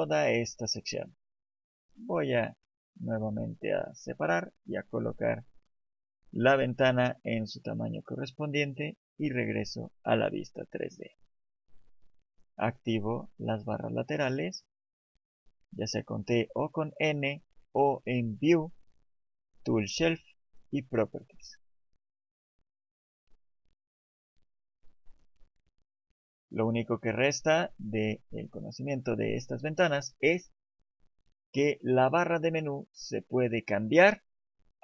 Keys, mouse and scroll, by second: 10.2 click, 12.9 t, 22.4 click, 23.0 middle click, 24.7 shift+middle click.